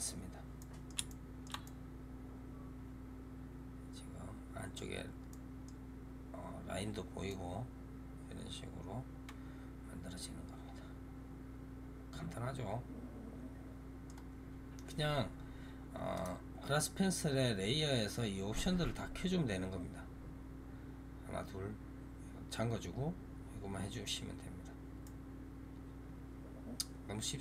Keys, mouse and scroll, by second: 0.0-0.5 scroll up 2, 0.5-4.6 middle drag, 5.2-5.8 middle drag, 5.8-7.1 scroll down 1, 7.1-16.0 middle drag, 16.0 click, 24.9-27.4 middle drag.